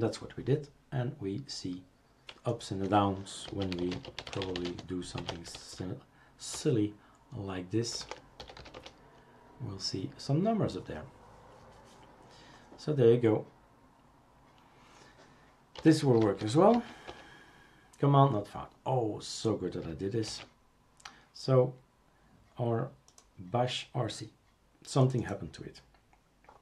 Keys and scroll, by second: 3.5-6.5 typing, 6.5 Return, 7.7-8.4 typing, 9.5-10.2 typing, 15.5-17.7 typing, 17.1 Return, 20.3 shift+super+q.